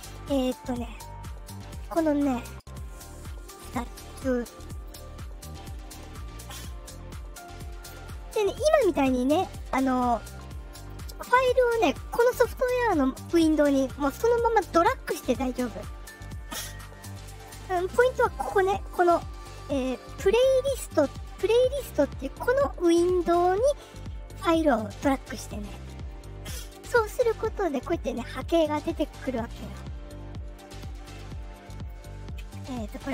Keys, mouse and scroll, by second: 1.4 click, 2.8 click, 3.9 click, 7.0-8.2 drag, 9.5-10.8 drag, 26.0-27.9 drag, 30.4-31.1 alt+scroll up 4, 31.3-32.0 alt+scroll down 3.